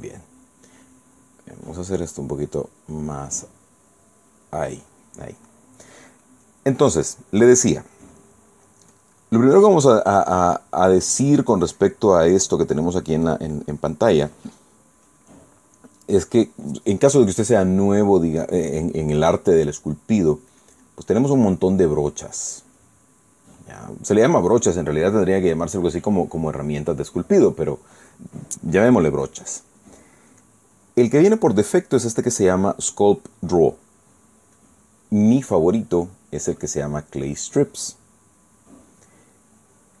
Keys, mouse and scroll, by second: 3.2-5.2 drag, 10.3-11.1 drag, 11.2-13.0 drag, 14.9 click, 17.1 click, 21.2 click, 31.0 click, 35.3 click.